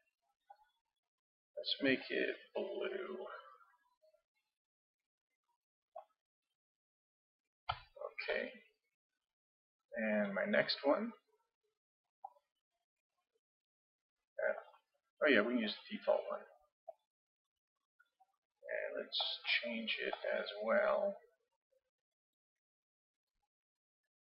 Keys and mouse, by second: 7.9-10.1 middle drag, 10.1-12.0 drag, 12.3-14.2 drag, 15.7-17.5 drag, 21.9-24.3 drag.